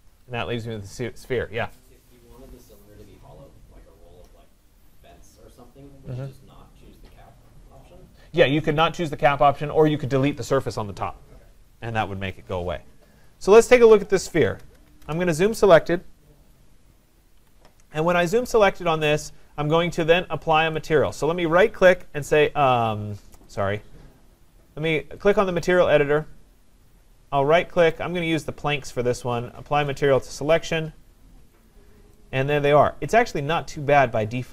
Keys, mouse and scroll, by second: 13.3 click, 14.5-15.4 typing, 17.4 Escape, 18.9 click, 20.9 right click, 23.6 click, 27.9 right click, 30.0 click, 31.7 click.